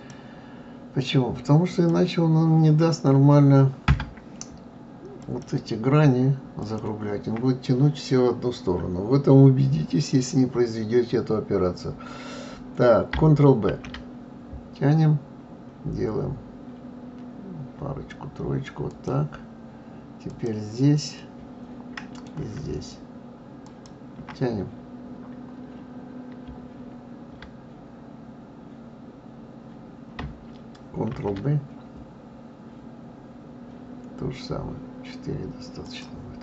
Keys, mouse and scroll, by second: 0.0 click, 1.7 click, 3.9 Tab, 5.2 click, 6.6 shift+click, 13.6 ctrl+b, 20.3 click, 21.2-23.6 middle drag, 23.6 shift+click, 31.1 ctrl+b.